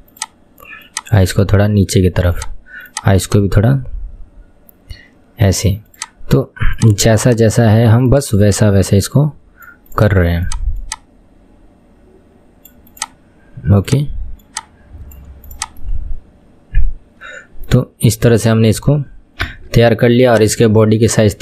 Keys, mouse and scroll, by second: 0.3 click, 0.9 click, 2.9 click, 3.3 click, 8.5 click, 10.9 click, 14.0 click, 15.3 click, 15.9-18.5 middle drag, 18.5 KP_1, 19.1-19.5 scroll down 1, 19.5 Tab, 20.4 click.